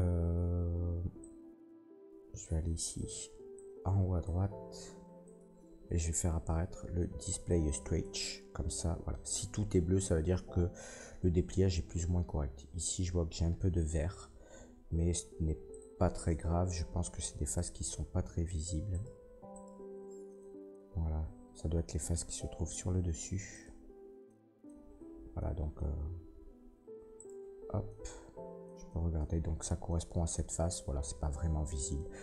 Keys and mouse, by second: 12.8 middle click, 12.8 right click, 17.5 middle click, 17.6-18.4 drag, 18.4 middle click, 18.5-18.8 drag, 18.8 middle click, 18.9-19.4 drag, 19.4 middle click, 19.6-21.7 drag, 21.9-23.6 shift+drag, 23.6 middle click, 24.1 click, 24.3-27.1 middle drag, 27.1 click, 27.3-32.2 middle drag.